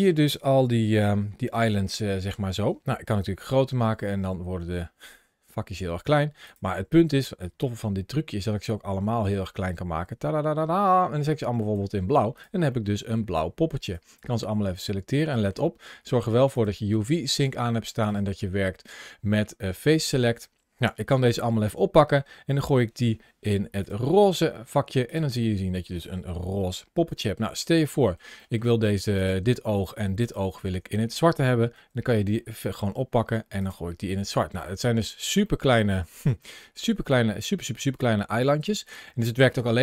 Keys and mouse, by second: 0.6 a, 1.5 a, 2.9 s, 6.3 click, 7.1 s, 11.4 click, 12.6 middle click, 13.9 click, 15.1 middle click, 16.4 click, 17.9 click, 20.9 g, 23.6 click, 24.9 click, 25.3 middle click, 27.0 shift+middle click, 27.9 shift+middle click, 28.2 middle click, 29.0 click, 31.5 g, 34.5 middle click, 35.4 middle click, 36.4 middle click, 38.5 middle click.